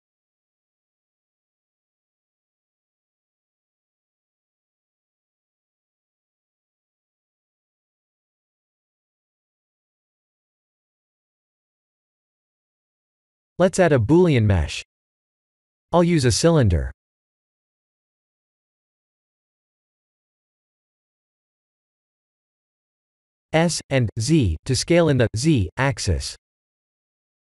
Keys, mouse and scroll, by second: 0.7 shift+click, 1.9 shift+click, 2.7 g, 7.4 shift+middle click, 8.0 middle click, 13.1 click, 13.9 KP_1, 14.7 shift+a, 19.0 r, 21.4 g, 22.5 s, 24.6 s, 25.8 g, 27.0 s.